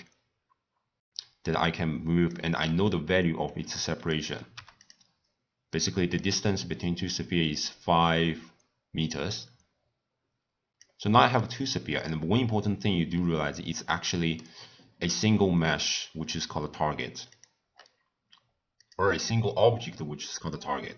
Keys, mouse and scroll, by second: 4.8 click, 5.7-9.2 middle drag, 9.2-11.4 drag, 11.4-12.1 middle drag, 12.1 click, 12.3-12.7 scroll down 2, 13.5 scroll up 2, 13.6-16.0 scroll down 1, 16.0-17.7 middle drag, 17.7 scroll up 1, 17.8 scroll down 1.